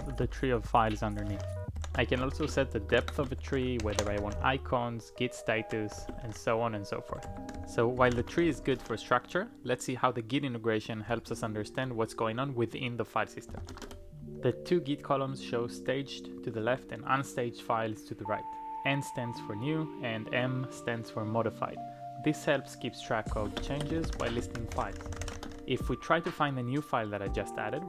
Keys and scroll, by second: 0.0-9.2 typing, 10.8-11.5 typing, 13.3-14.0 typing, 23.1-25.8 typing.